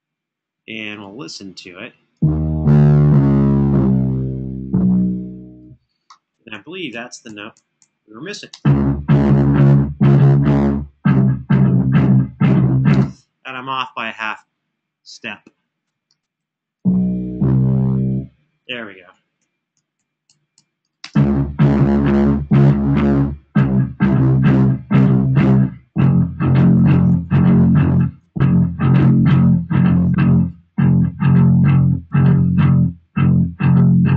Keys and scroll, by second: 6.4 Escape, 8.3 space, 12.7 space, 19.1 Home, 19.5 Home, 19.8 Home, 20.3 Home, 26.6 super+[, 27.0 super+[.